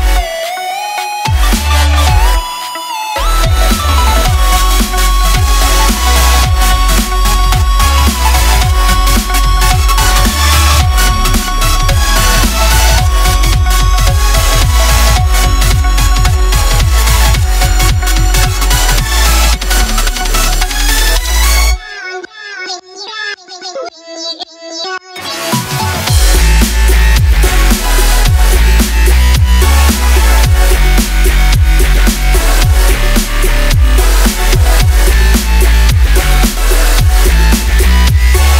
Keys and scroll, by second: 0.4-1.4 typing, 2.1 Tab, 4.5 shift+a, 12.6-14.0 typing, 19.5 shift+a, 23.5-28.5 typing, 34.0-35.6 typing, 37.6-38.5 typing.